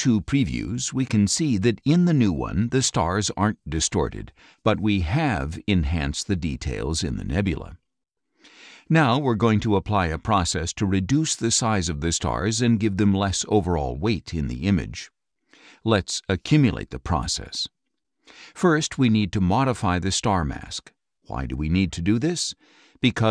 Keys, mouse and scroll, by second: 0.0 ctrl+Left, 0.8 ctrl+Right, 2.0 ctrl+Left, 2.9 ctrl+Right, 4.0 ctrl+Left, 5.1 ctrl+Right, 6.0 ctrl+Left, 6.9 ctrl+Right, 7.9 ctrl+Left, 9.1 ctrl+Right, 16.1 click.